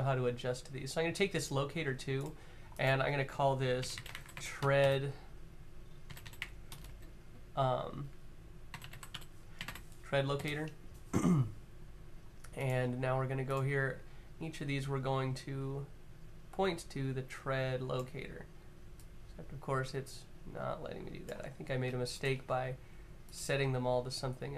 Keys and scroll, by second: 3.6-4.5 typing, 5.8-6.6 typing, 7.7-9.4 typing.